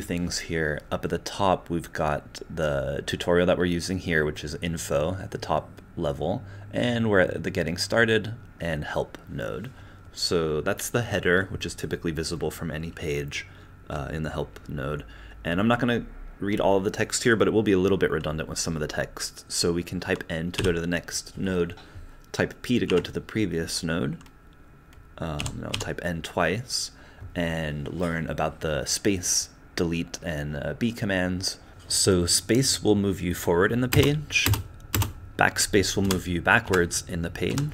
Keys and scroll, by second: 20.5 n, 22.9 p, 25.4 n, 25.7 n, 31.7 n, 33.9 space, 34.5 space, 34.9 space, 36.0-37.7 typing.